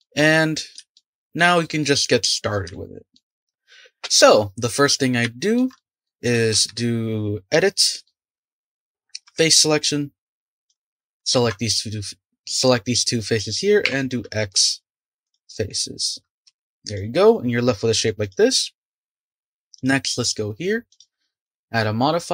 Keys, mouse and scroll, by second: 1.6-2.3 scroll up 5, 2.3-2.7 scroll down 2, 2.7-3.3 shift+middle drag, 5.3-6.2 shift+middle drag, 6.2 click, 6.5 Tab, 8.0-9.4 middle drag, 9.4 3, 10.7 click, 11.3 shift+click, 13.8 x, 16.4 Tab, 16.8 click, 17.2-18.2 middle drag, 18.2 click, 19.7 click, 20.9 click.